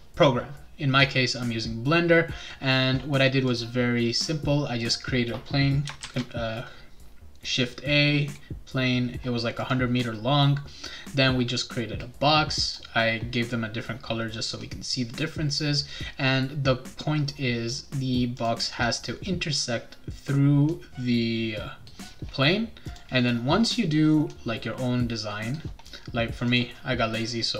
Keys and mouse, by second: 3.5 click, 6.0 shift+a, 9.6 click, 12.6 click, 18.4 click, 22.9 click, 26.4 click.